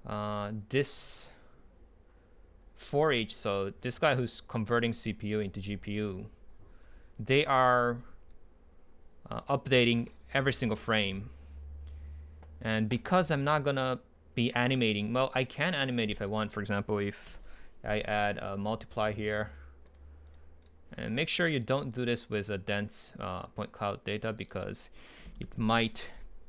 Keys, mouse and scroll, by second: 15.8-17.5 drag, 17.5 Return, 18.1-21.1 drag, 24.5-26.4 drag.